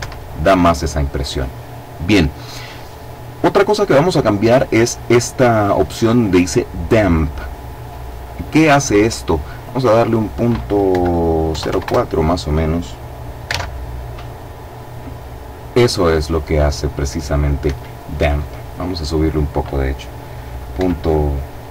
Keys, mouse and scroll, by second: 3.0-3.7 scroll up 2, 9.1 click, 10.5 KP_Decimal, 11.2 KP_4, 11.4 KP_Enter, 13.0 alt+a, 17.2 Escape, 18.5 click, 20.3 KP_Decimal, 21.6 KP_1, 21.6 KP_Enter.